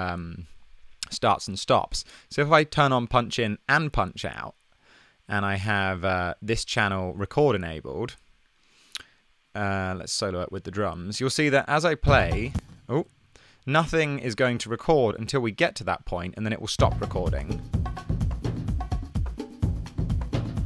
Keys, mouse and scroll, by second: 12.2 space, 12.5 space, 12.9 super+z, 16.9 click.